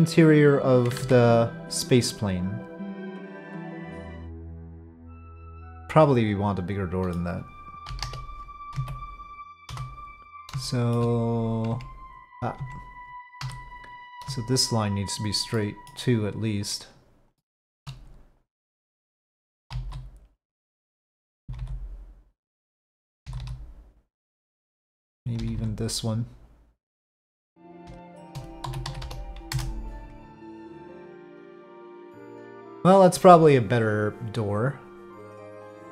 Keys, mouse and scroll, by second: 1.0 ctrl+z, 1.6-4.0 drag, 4.0 z, 4.3-7.1 middle drag, 7.9 KP_5, 8.0 KP_7, 8.7 z, 10.6 shift+middle click, 11.7 Tab, 12.6 Tab, 13.4 1, 14.4 shift+click, 15.0 shift+click, 15.5 shift+middle click, 17.3 shift+middle click, 18.1-19.7 drag, 19.7 g, 21.4 g, 22.9 click, 23.2 g, 24.9 click, 25.4 g, 28.6 s, 30.8 middle click, 32.1-35.2 middle drag, 35.2 middle click, 35.8 p.